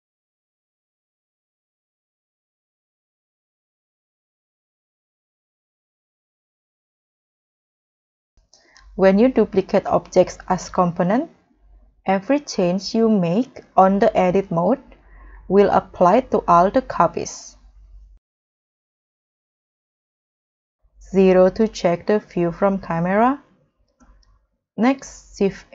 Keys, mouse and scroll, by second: 1.3 g, 5.9-6.3 scroll down 3, 6.3 middle click, 7.2 middle click, 7.2 scroll up 4, 11.0-11.6 scroll down 3, 11.8 scroll up 3, 15.6 g, 16.5 Escape, 19.0 middle click, 19.3 scroll down 1, 19.7-20.4 scroll up 3, 20.7 middle click, 21.5 middle click, 21.8 0, 24.0 middle click, 24.6-25.0 scroll down 3, 25.0 middle click, 25.5 scroll up 1.